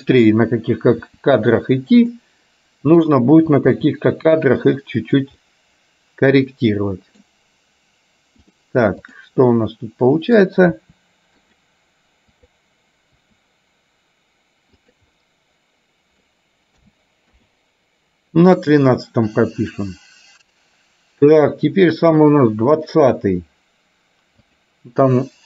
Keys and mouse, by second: 1.2 r, 3.1 click, 3.8 r, 5.4-7.3 middle drag, 9.1 click, 9.6 middle click, 10.9 r, 12.4 click, 13.3 r, 15.2-16.3 middle drag, 17.4 i, 18.9-23.4 drag, 24.6 click, 25.1-25.4 middle drag.